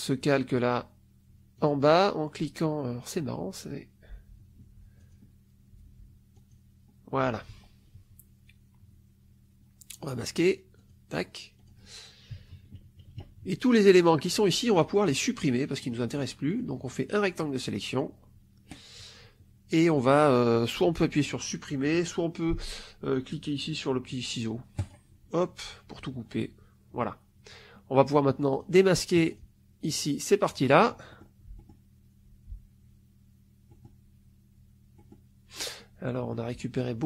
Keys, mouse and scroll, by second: 1.5 click, 5.0 click, 6.3 click, 10.7 click, 11.5 click, 15.7 click, 16.4 click, 17.0 click, 24.7 click, 28.4 click, 29.2 click, 29.8 click, 31.0 middle click, 31.5 middle click, 33.6 middle click, 34.9 middle click, 36.1 middle click.